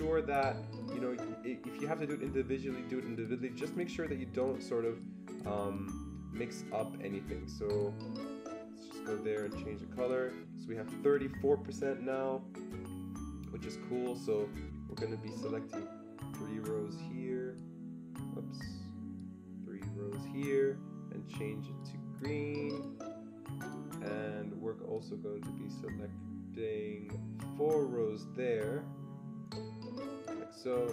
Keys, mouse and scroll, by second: 3.2 click, 4.4 click, 5.3-9.3 drag, 9.3 click, 10.1-12.2 drag, 15.3-22.7 drag, 22.7 click, 23.6 click, 25.7 click, 25.7-30.9 drag.